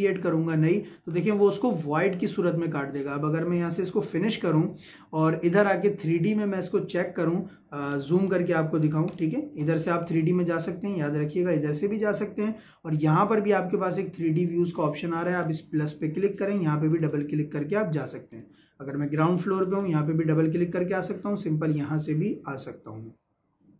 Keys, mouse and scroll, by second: 1.0 Escape, 3.4 click, 4.7 Escape, 6.1 click, 7.5 scroll up 1, 8.8 click, 9.1 shift+scroll up 1, 9.2 shift+middle click, 9.7 Escape, 15.4 click, 20.7-21.6 scroll up 1, 21.6 click.